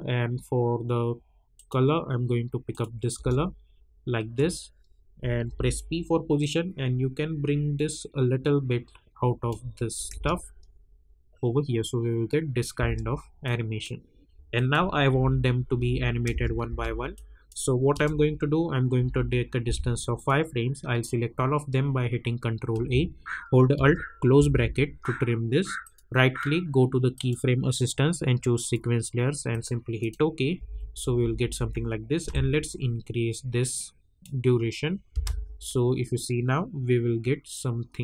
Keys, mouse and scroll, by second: 1.5 click, 3.1 Return, 5.4 p, 6.4-10.1 drag, 10.1 space, 12.7 space, 13.4 click, 15.1 u, 15.8 u, 16.3 space, 17.1 click, 17.9 =, 19.0 =, 20.1 click, 22.7 ctrl+a, 24.3 alt+], 25.8 right click, 27.1 click, 30.5 -, 30.8 -, 32.3-34.5 drag, 34.5-35.1 scroll down 1, 35.1 space.